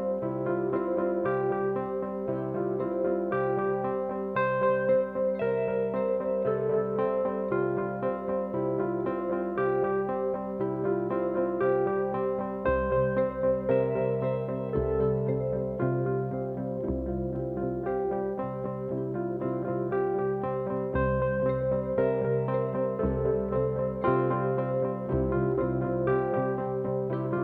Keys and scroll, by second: 2.0 ctrl+d, 2.1 Escape, 3.2 F1, 11.7 p, 14.3 p, 16.5 F1, 16.7 F2, 17.6 ctrl+d, 21.7 F1, 24.1 F1, 24.3 F2.